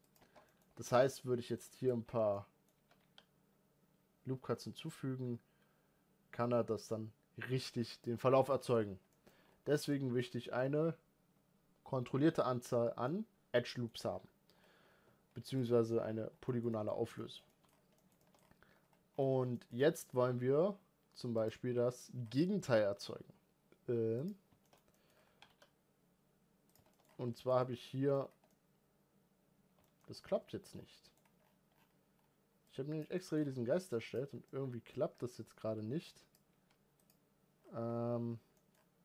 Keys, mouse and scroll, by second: 0.0 Tab, 0.2 middle click, 0.6 ctrl+r, 1.9 Tab, 2.1 middle click, 2.5 g, 7.9 scroll down 5, 8.1-8.6 shift+middle drag, 8.6 scroll up 3, 8.9 middle drag, 9.1 scroll up 1, 9.2 Tab, 9.6-12.0 middle drag, 12.0 Tab, 12.8-13.9 middle drag, 13.9-14.3 scroll up 2, 14.3-14.8 scroll down 4, 15.4 x, 15.8-16.2 scroll down 4, 16.2-16.7 shift+middle drag, 16.7 scroll up 1, 16.9-17.5 middle drag, 17.5 scroll up 1, 17.7-18.2 shift+middle drag, 18.2-18.9 scroll up 5, 18.9-19.3 scroll down 2, 19.3-21.2 shift+middle drag, 21.2 click, 23.0 scroll up 5, 24.0 click, 24.4 shift+middle click, 24.9 scroll up 1, 25.1 g, 26.7 shift+middle drag, 26.8 scroll up 4, 27.1-28.0 middle drag, 28.0 scroll down 1, 28.2-29.8 middle drag, 30.0-30.3 scroll down 2, 30.6 scroll down 3, 30.8-32.4 middle drag, 32.4-37.3 drag, 37.3-39.0 scroll up 2.